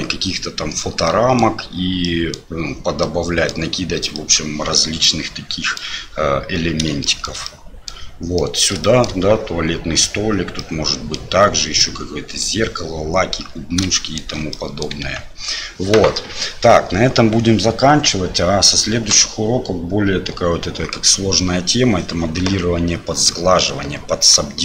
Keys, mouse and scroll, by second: 1.1 middle click, 2.1 middle click, 3.1 middle click, 4.2-5.8 middle drag, 7.1 shift+middle click, 7.5 middle click, 8.4 middle click, 8.9 shift+middle click, 10.6 middle click, 11.7 middle click, 14.0 shift+middle click, 14.6 click, 15.0 Tab.